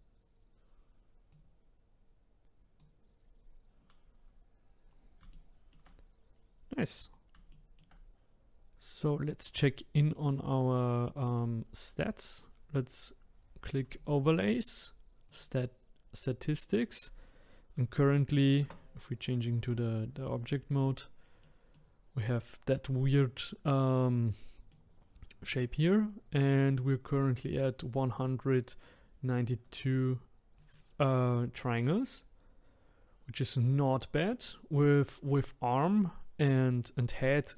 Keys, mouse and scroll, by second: 4.6-5.1 scroll down 5, 5.3-6.3 shift+middle drag, 6.3-6.9 scroll up 3, 6.9-7.5 scroll down 1, 7.5-10.5 shift+middle drag, 10.6 click, 13.9 click, 18.6 Tab, 20.0-20.4 scroll down 1, 20.4-29.5 middle drag, 30.5 click, 33.0-33.9 scroll up 1, 33.9-34.3 scroll up 1.